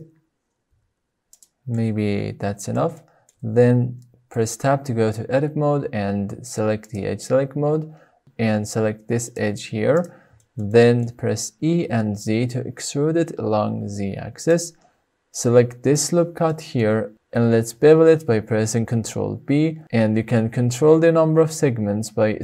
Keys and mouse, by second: 0.9 s, 1.4 drag, 1.7 middle drag, 1.9-2.6 drag, 2.6 middle click, 2.7 click, 2.8-3.3 shift+middle drag, 4.4 Tab, 6.9 click, 9.1 shift+middle click, 11.0 shift+middle click, 11.9 e, 12.3 z, 15.0 click, 16.9 middle click, 17.8 shift+middle click, 19.3 shift+middle click, 20.2 ctrl+b.